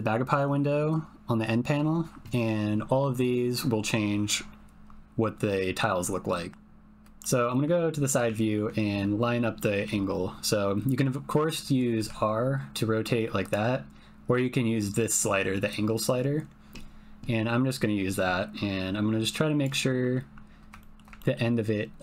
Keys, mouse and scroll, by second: 5.6 click, 6.5 ctrl+z, 7.2 click, 8.3 ctrl+middle click, 9.5 shift+middle click, 11.9 r, 13.4-14.9 drag, 15.8-18.6 drag, 18.9 click, 20.8 shift+click, 21.1 ctrl+click.